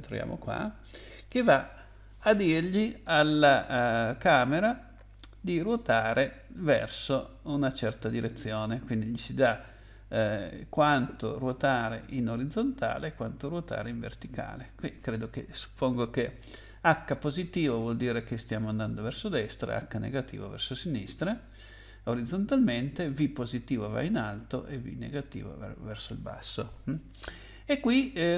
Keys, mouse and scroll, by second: 0.0 double click.